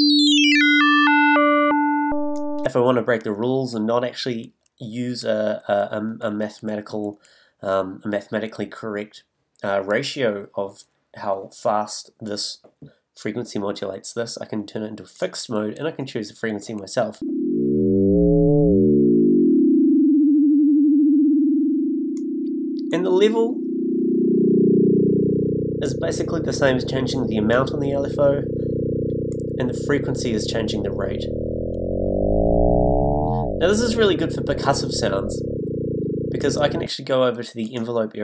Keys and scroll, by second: 17.2 s.